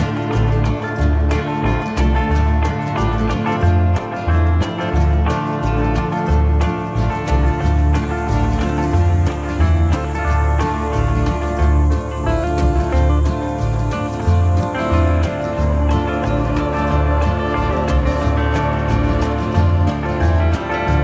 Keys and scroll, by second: 10.1 shift+F2, 17.1 shift+F2, 17.6 Escape.